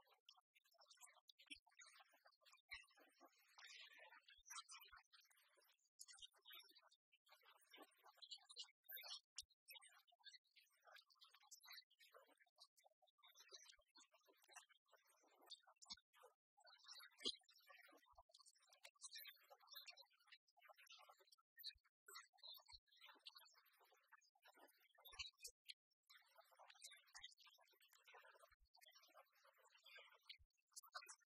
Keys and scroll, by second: 19.4 ctrl+r.